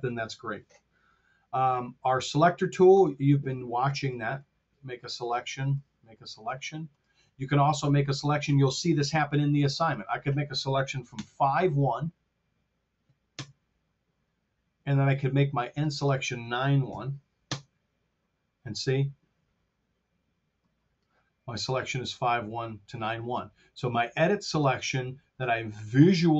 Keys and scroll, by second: 13.2 Home, 16.8 KP_9, 17.3 Home.